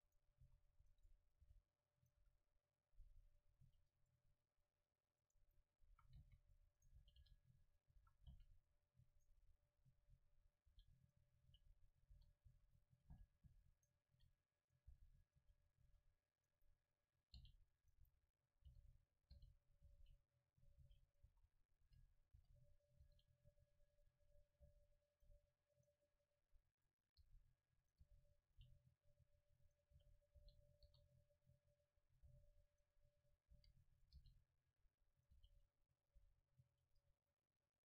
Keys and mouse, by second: 0.2-1.6 drag, 0.5 s, 1.3 middle click, 1.5 g, 2.2 a, 3.7 ctrl+r, 3.9 click, 5.4-9.1 drag, 5.9-8.3 typing, 9.3 click, 10.1 e, 10.7 g, 11.5 r, 11.5-13.1 drag, 12.1 s, 13.9-15.8 right drag, 14.1 s, 14.8-18.3 drag, 14.9 g, 15.4 r, 15.9 e, 16.7-18.3 right drag, 17.4 g, 18.7-23.1 typing, 19.3 click, 19.7 click, 20.7-21.9 drag, 24.7 r, 25.3 click, 25.3 s, 26.1-27.1 middle drag, 27.2 g, 28.0 r, 28.5 g, 30.0 r, 30.4 g, 30.8 click, 30.9 s, 32.3 s, 33.2 click, 33.6 e, 34.2 g, 35.4 r, 36.1-37.8 drag, 36.2 s, 36.9 Tab, 37.5 middle click.